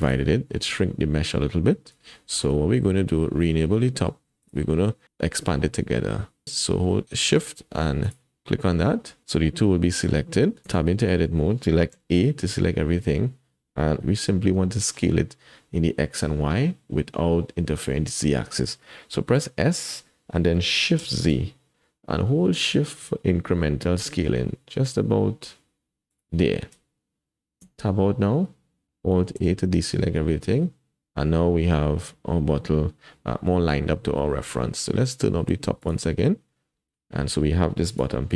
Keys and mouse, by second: 0.0 click, 2.2 shift+middle click, 4.4 click, 10.7 Tab, 11.9 a, 14.0 s, 14.7 shift+click, 19.4 s, 27.6 Tab, 29.4 alt+a, 35.8 click, 37.9 click, 38.2 g.